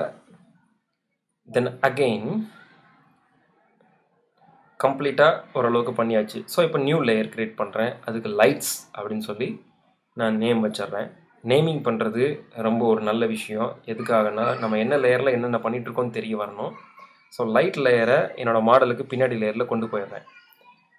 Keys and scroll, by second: 7.9 shift+l, 9.6 shift+BackSpace, 9.8 shift+l, 13.3-14.5 typing.